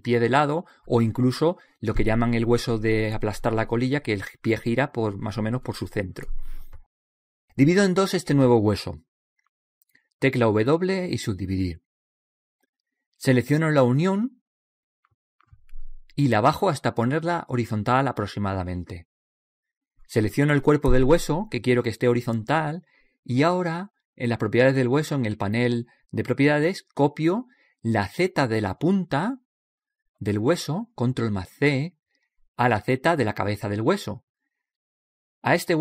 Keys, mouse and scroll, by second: 9.7 w, 12.5 right click, 13.8 click, 19.5 click, 22.5 right click, 27.9 ctrl+c, 33.8 ctrl+c.